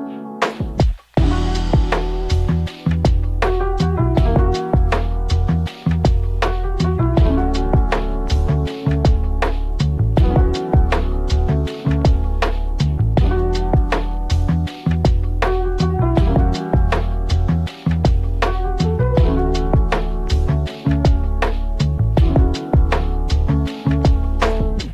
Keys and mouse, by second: 1.4 click, 2.0 click, 4.1 click, 4.5-5.5 drag, 6.0 shift+middle click, 7.2 click, 7.9 click, 8.4 middle click, 9.3 click, 9.7 click, 10.0 click, 10.8 click, 11.1 click, 11.7 middle click, 12.3 middle click, 13.2 Tab, 13.9 middle click, 14.3 g, 16.4 middle click, 16.9 Tab, 19.3 click, 20.7 click, 22.2 middle click, 23.1-24.2 drag.